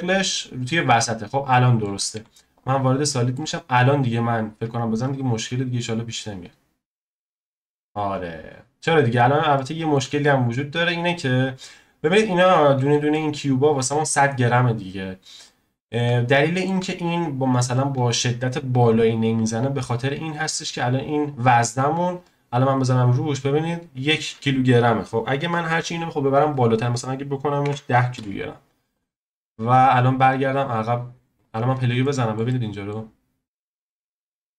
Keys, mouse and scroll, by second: 0.9-1.5 scroll down 3, 1.5-2.1 middle drag, 2.1 z, 2.8 scroll down 1, 3.1-3.5 shift+middle drag, 3.5 click, 5.0-8.0 drag, 8.9 scroll up 2, 9.6-10.8 shift+middle drag, 10.8-12.9 drag, 12.9 scroll down 1, 13.1-15.3 middle drag, 15.3 click, 16.2-17.7 shift+middle drag, 17.7-20.7 drag, 22.2 click, 26.7-29.0 drag, 30.2 click, 30.6-31.8 drag, 31.8-32.1 scroll down 1, 32.1-34.5 shift+middle drag.